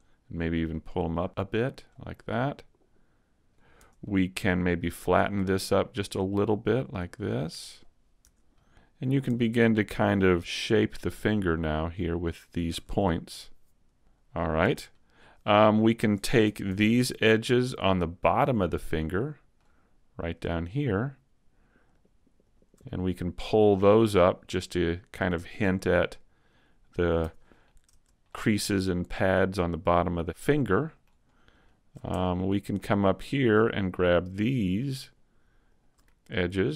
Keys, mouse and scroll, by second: 0.7 click, 2.1 scroll down 2, 2.4 middle click, 3.8 Tab, 3.8 middle click, 3.8 scroll up 1, 4.0 middle click, 5.1 right click, 5.9 shift+right click, 6.7 click, 8.2 Tab, 8.5 middle click, 9.3 Tab, 9.5 middle click, 10.3 s, 12.3 click, 12.7 a, 13.4 middle click, 14.3 Tab, 14.6 Tab, 14.9 middle click, 16.5 ctrl+Tab, 17.0 middle click, 20.2 right click, 20.9 shift+right click, 21.9 shift+right click, 22.4 shift+right click, 22.9 middle click, 24.8 click, 27.3 a, 27.5-27.9 scroll down 2, 27.9 Tab, 28.3 middle click, 31.3-32.1 scroll up 2, 31.7 shift+middle click, 32.1 Tab, 32.4 middle click, 33.3 right click, 34.1 shift+right click, 35.0 right click, 35.8 right click, 36.0 middle click.